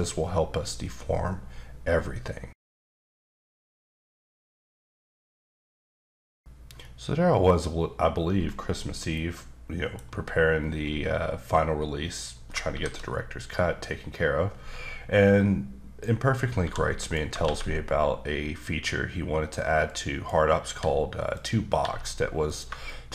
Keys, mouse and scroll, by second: 11.7-12.2 scroll up 1, 12.3 scroll down 2, 12.7 shift+a, 15.3 click, 16.6 g, 17.0 click, 17.4 shift+a, 19.9 click, 20.7 g, 21.3 click, 21.8 g, 22.5 click, 22.8 shift+middle click.